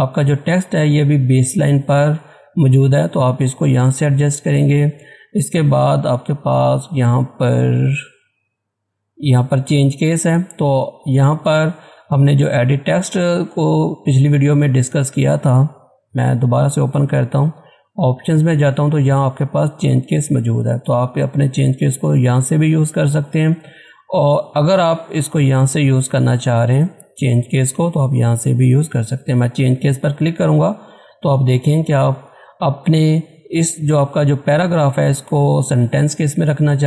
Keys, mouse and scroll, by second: 13.3 click, 17.4 click, 22.8 click, 22.8 click, 29.7 click.